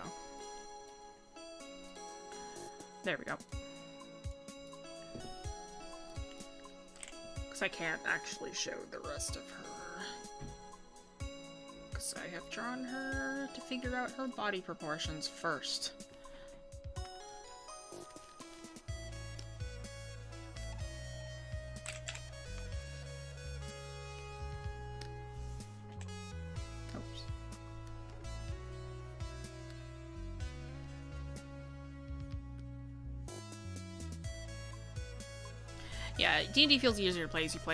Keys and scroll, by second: 13.1 scroll.